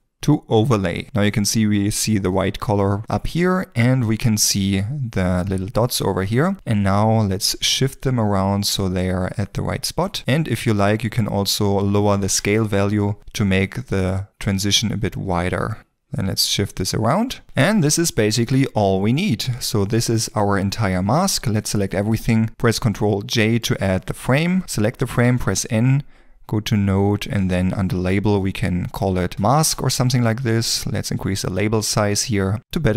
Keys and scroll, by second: 12.2 5, 12.4 Return, 21.3 g, 22.8 ctrl+j, 25.8 n, 32.2 Return.